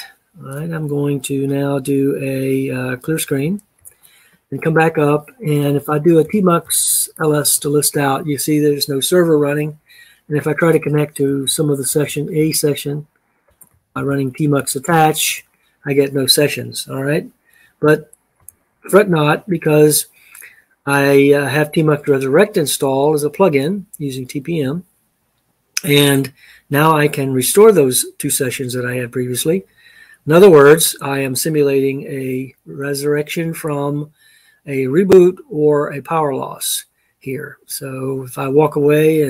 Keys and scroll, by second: 3.7 ctrl+l, 5.9-7.7 typing, 11.2-15.5 typing, 18.5 ctrl+l.